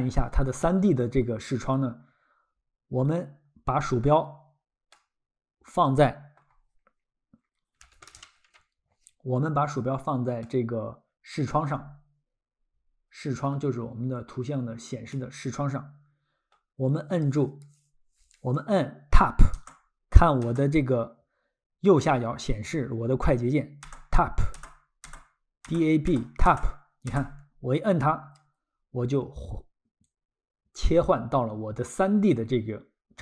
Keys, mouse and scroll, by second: 0.0-0.3 scroll, 4.9 middle click, 10.4 middle click, 13.7-14.3 scroll, 15.2 middle click, 19.6 Tab, 23.8 Tab, 30.0 ctrl+click.